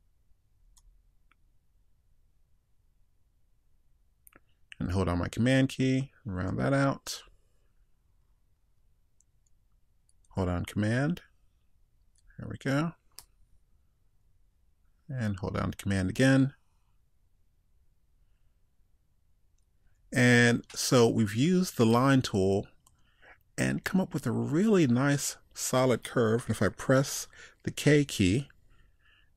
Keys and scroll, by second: 0.8 super+z.